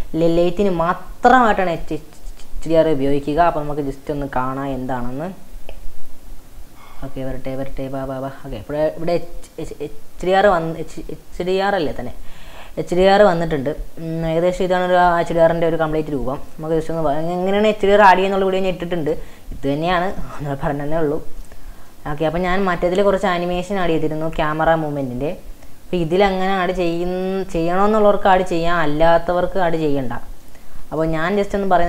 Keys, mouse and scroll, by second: 1.4-1.8 scroll down 3, 1.8-2.5 middle drag, 2.5-4.3 scroll down 5, 6.7 click, 7.2-7.6 scroll down 6, 8.3-9.2 scroll down 7, 9.3-10.7 middle drag, 10.7-11.8 middle drag, 11.9-13.2 middle drag, 14.3 middle click, 16.5-17.0 scroll up 7, 17.0 scroll down 1, 17.1-17.8 scroll up 6, 17.8-20.7 middle drag, 20.7 scroll up 2, 21.2 scroll down 2, 21.5 space, 21.9-22.5 shift+middle drag, 22.5 scroll up 4, 23.9-24.8 shift+middle drag, 24.8 scroll down 2, 25.1-28.1 shift+middle drag, 30.5 space, 30.8 scroll down 2, 31.0 middle click.